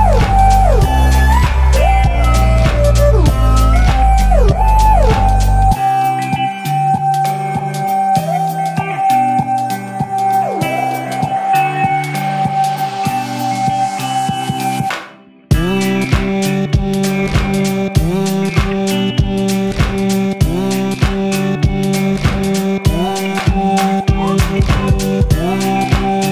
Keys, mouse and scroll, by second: 2.4 alt+click, 2.5 alt+click, 6.8 alt+click, 10.0 b, 11.7-13.7 drag, 17.2 click, 17.3 alt+right click, 17.4-18.6 drag, 18.8 x, 20.0 click, 21.5-23.6 drag.